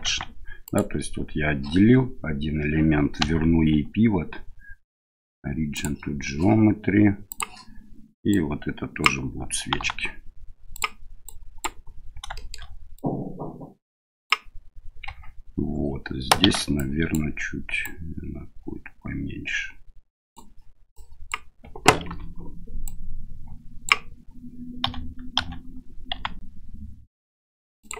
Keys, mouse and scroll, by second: 0.1 Tab, 0.6 right click, 3.2 w, 8.3 click, 9.8 s, 11.3 click, 12.4 shift+middle click, 13.0-14.3 drag, 15.1 Tab, 16.4 shift+z, 16.8 click, 17.8-20.4 drag, 21.0 click, 22.1 o, 22.8-23.9 drag, 24.8 a, 25.4 a, 26.1 s.